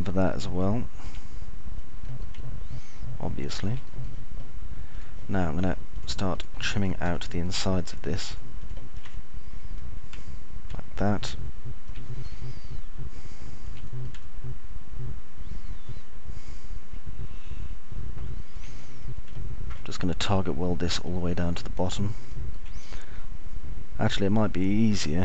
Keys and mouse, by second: 3.8-5.3 alt+middle drag, 5.4 middle click, 8.6 ctrl+click, 9.8 ctrl+click, 11.8 Delete, 12.6 alt+middle click, 13.6 middle click, 13.9-15.4 alt+middle drag, 15.8-19.9 alt+middle drag, 20.9 alt+middle click, 23.9 alt+middle click.